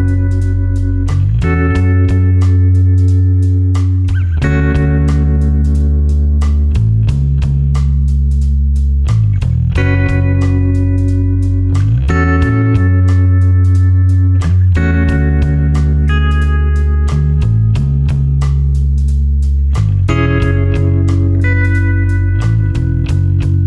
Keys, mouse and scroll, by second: 1.1-5.0 scroll up 1, 5.0 click, 6.9 space, 7.1 click, 7.5 space, 7.9 ctrl+click, 8.6 ctrl+click, 10.3 ctrl+click, 12.3-15.0 ctrl+alt+drag, 15.8 ctrl+alt+click.